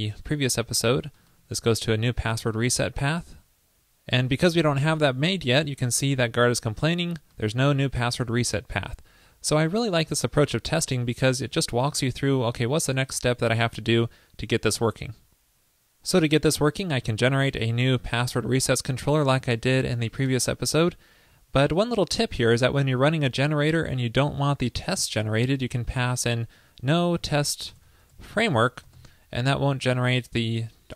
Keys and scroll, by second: 3.1 super+s, 17.1 super+v.